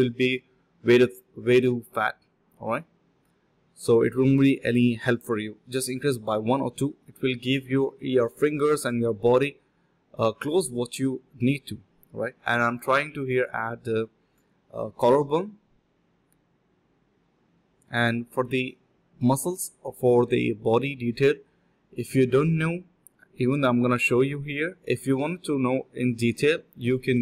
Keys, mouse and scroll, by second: 0.0-2.4 typing, 6.0 alt+click, 6.2 alt+click, 6.3 alt+click, 11.3 double click, 11.6 ctrl+b, 11.9-12.7 typing, 14.6 shift+click, 14.7 shift+double click, 14.8 shift+click, 15.4 alt+click, 15.6 alt+click, 15.7 alt+click, 16.0 ctrl+b, 16.6-17.1 typing, 17.4 double click, 18.8 typing, 19.4 double click, 20.5 shift+click, 23.1-23.4 typing, 23.7 double click, 26.9 double click.